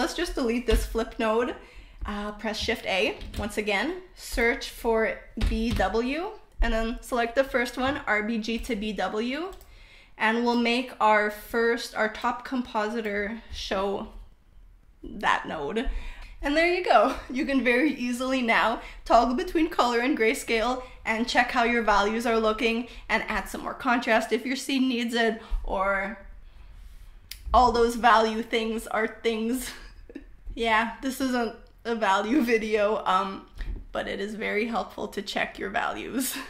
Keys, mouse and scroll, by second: 0.8 click, 1.6 Delete, 2.5 shift+a, 10.0-10.8 drag, 11.6-12.5 drag, 15.8 click, 18.8-19.4 drag, 18.8-19.4 middle drag, 19.8 click, 23.6 drag, 24.4 drag, 26.4-27.9 drag, 26.6 middle click, 29.2 click, 31.3 drag, 32.1 click, 33.7 click, 34.8 click.